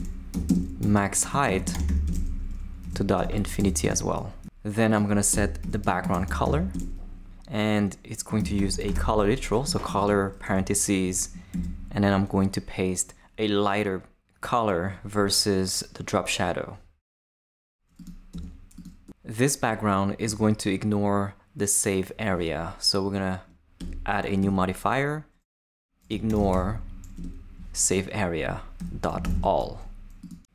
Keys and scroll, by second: 0.0-4.1 typing, 5.3 Return, 5.4-6.9 typing, 7.7 shift+Return, 8.1-10.4 typing, 10.5 shift+Left, 11.0 shift+super+Left, 11.5 super+v, 18.3 Tab, 23.8 Return, 24.4 •, 25.9-27.1 typing, 27.1 Return, 28.8-29.7 typing.